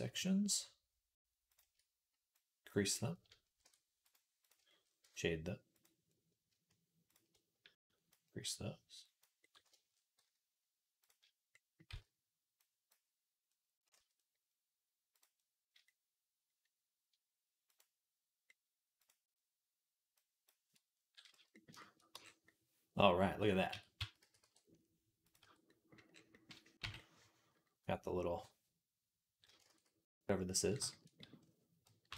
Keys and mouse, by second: 1.4 shift+click, 1.6 middle click, 2.2-5.6 drag, 3.5 Tab, 3.9-5.6 middle drag, 3.9-28.3 right drag, 4.9 Tab, 7.7-10.9 drag, 7.7-10.9 middle drag, 10.0 z, 11.7 z, 12.5-15.0 drag, 12.5-15.0 middle drag, 15.0 z, 17.5 click, 17.5 middle click, 18.8 click, 18.8 middle click, 20.0-25.2 drag, 20.0-25.2 middle drag, 21.1 z, 22.0 Tab, 23.5 Tab, 23.8 a, 24.0 s, 25.2 Tab, 27.4 click, 27.4 middle click, 29.5 ctrl+s, 31.9 KP_1.